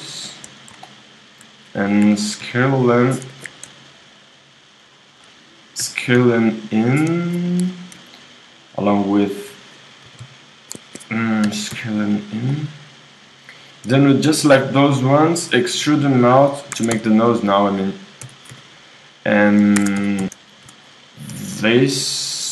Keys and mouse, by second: 2.0 s, 4.0-6.5 drag, 5.8 s, 8.3-10.7 drag, 10.0 g, 11.5 s, 13.8-16.0 drag, 15.5 e, 16.8 ctrl+Tab, 17.5-19.4 drag, 18.2 x, 19.8 ctrl+Tab, 20.5 click, 20.6 right click.